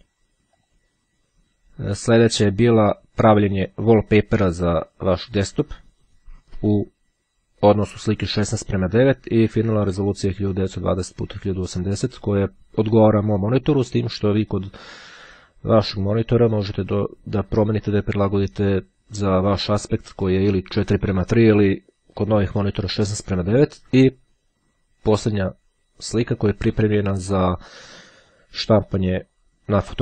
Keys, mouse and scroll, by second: 0.7 click, 2.7 click, 25.3 click.